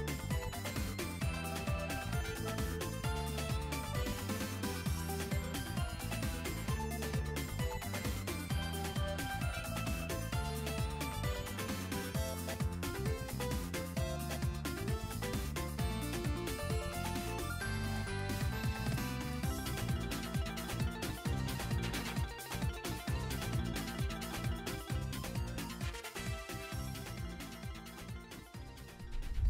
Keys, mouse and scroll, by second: 0.5 scroll up 2, 0.7 r, 1.6 r, 4.5 r, 5.0-8.3 drag, 8.8-9.1 scroll down 4, 10.4 click, 10.9-14.4 drag, 15.2 r, 16.3 r, 28.3-29.1 scroll down 3, 29.1 scroll down 2, 29.4 shift+middle click.